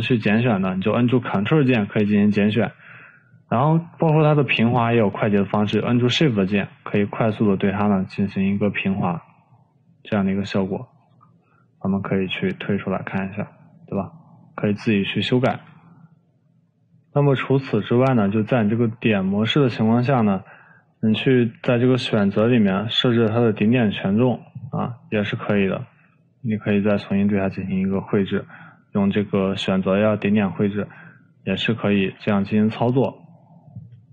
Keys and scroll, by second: 0.2 ctrl+z, 2.2 ctrl+z, 32.5 ctrl+z.